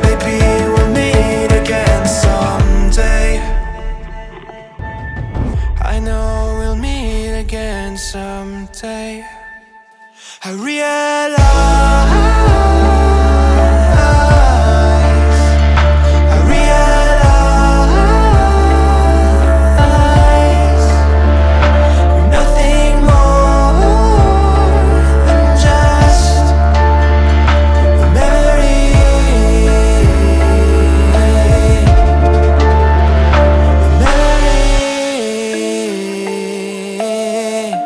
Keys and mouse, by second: 1.9 middle click, 2.4 middle click, 3.2 Tab, 3.8-5.4 middle drag, 7.5 shift+middle click, 13.5-14.0 shift+middle drag, 16.3-16.7 ctrl+middle drag, 23.2 shift+a, 28.0 x, 29.3 Return, 31.7 g, 31.9 y, 35.7 click, 36.1 z.